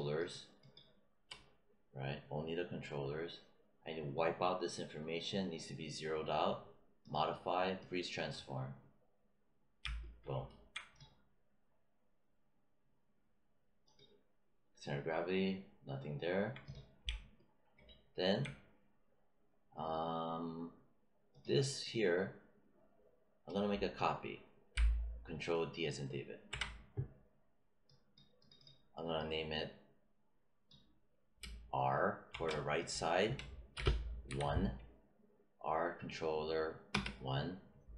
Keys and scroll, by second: 26.4 ctrl+d, 32.2 shift+r, 33.7 BackSpace, 34.2 1, 36.8 Return.